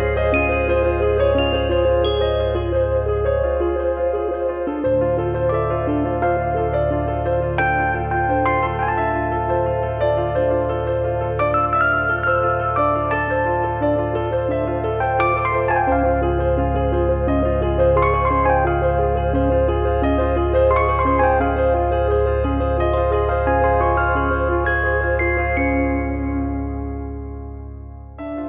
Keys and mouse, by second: 0.5 click, 2.2 click, 3.1 middle click, 5.9 shift+click, 8.7 click, 8.7 e, 9.8 click, 11.1 e, 13.1 click, 14.2 click, 14.4 middle click, 14.8 click, 15.5 middle click, 16.8 click, 18.5 click, 19.1 middle click, 19.4 click, 20.7 click, 21.2 middle click, 23.1 click, 25.0 click, 25.8 middle click, 26.0 middle click, 26.9 middle click, 27.2 shift+middle click, 27.7 click.